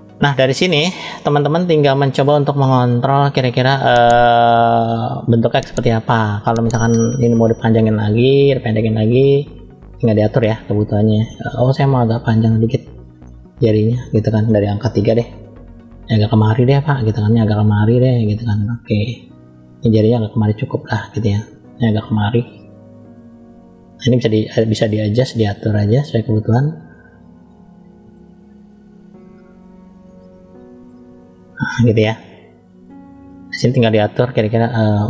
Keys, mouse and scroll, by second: 1.3 shift+middle click, 2.2-3.3 middle drag, 4.9 click, 5.7-6.9 middle drag, 7.1-7.7 scroll down 1, 7.7 middle click, 7.7-8.4 scroll down 1, 11.6 click, 13.1 middle click, 14.8 KP_3, 16.0 click, 17.8 click, 19.8 click, 22.1 click, 24.2 click, 25.1 click, 25.7 click, 26.3 click, 26.8 click, 27.1 click, 27.7 click, 28.0 click, 28.4 click, 28.8 click, 29.3 click, 29.6 click, 30.2 click, 30.6 click, 30.9 click, 31.8 middle click, 32.1-32.5 scroll up 1, 33.2 middle click, 33.2 scroll up 2.